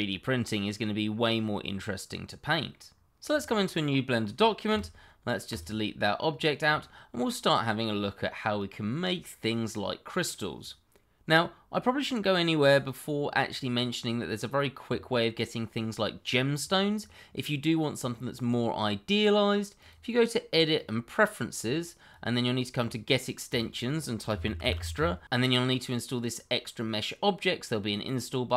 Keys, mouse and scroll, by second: 4.7 x, 5.5 click, 6.1 scroll up 1, 6.8 shift+middle click, 6.8 middle click, 6.9 shift+middle click, 7.4-7.9 scroll down 1, 7.9 middle click, 19.8 click, 24.9 e.